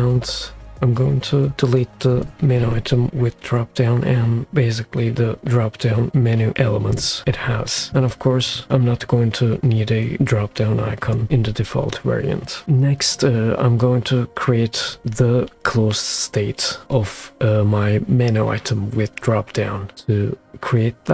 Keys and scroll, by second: 3.0 BackSpace, 7.2 BackSpace, 11.1 BackSpace.